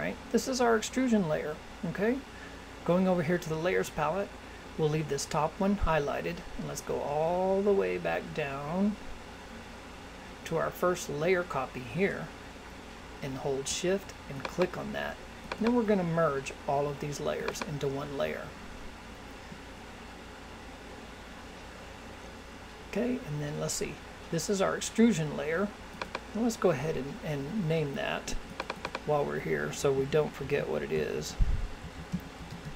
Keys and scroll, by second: 29.9 shift+e.